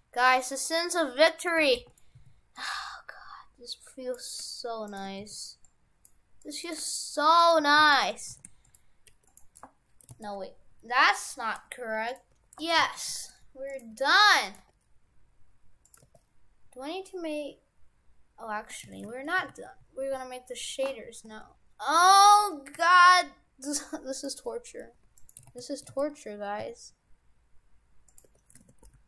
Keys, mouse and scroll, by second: 1.6 shift+f, 2.2 c, 4.9 shift+right click, 5.2 c, 7.0 shift+right click, 7.6 shift+right click, 7.8 c, 8.3 shift+f, 9.0 Delete, 10.1 ctrl+z, 10.9 Delete, 12.3 Tab, 12.6 shift+f, 13.9 g, 14.6 g, 16.0 g, 18.9 shift+f, 22.4 Tab, 22.8 a, 23.1 e, 24.3 Tab, 24.8 g, 25.5 ctrl+z, 26.0 ctrl+z, 26.6 e, 28.2 Tab, 28.6 shift+f.